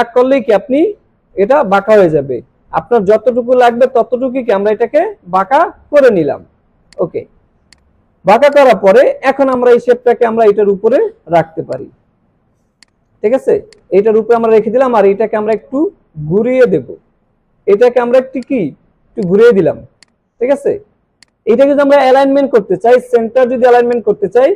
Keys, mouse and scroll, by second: 6.9 click, 8.2 alt+scroll down 1, 8.5-11.4 drag, 12.5 alt+scroll up 1, 12.7 space, 12.8 click, 13.6 space, 13.7-18.4 drag, 19.7 alt+scroll down 1, 20.0 space, 20.1-20.6 click, 20.5 space, 21.2 click, 23.9 click.